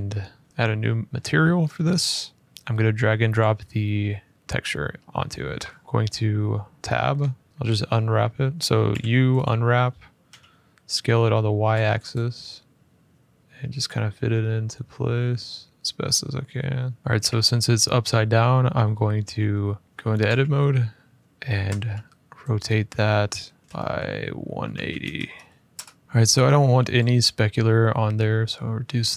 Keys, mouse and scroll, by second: 1.1 scroll, 1.2 middle click, 1.6 middle click, 2.4 click, 3.1 click, 4.5 middle click, 5.8 Tab, 6.1 scroll, 6.9 scroll, 7.5 click, 7.9 middle click, 8.6 u, 9.2-10.5 drag, 10.0 s, 10.7 click, 11.5 y, 12.7-16.9 drag, 13.4 s, 17.0 middle click, 17.1 Tab, 17.8 scroll, 19.0 u, 19.7 Escape, 20.0 a, 21.4 r, 23.6-24.9 typing, 25.5 Return, 26.0 scroll, 26.7 click, 28.3-29.1 scroll.